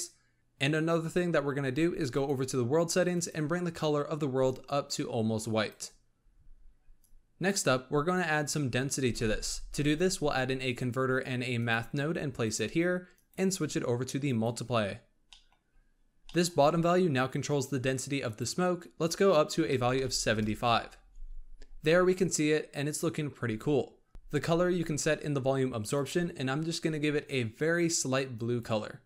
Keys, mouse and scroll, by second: 1.9 click, 3.0 click, 6.9-9.1 drag, 9.1 shift+a, 13.0-15.2 drag, 15.2-15.6 middle drag, 15.6-16.2 scroll up 1, 16.2 middle click, 16.4-18.2 scroll up 1, 18.2-23.2 drag, 23.2 scroll up 2, 25.1 click.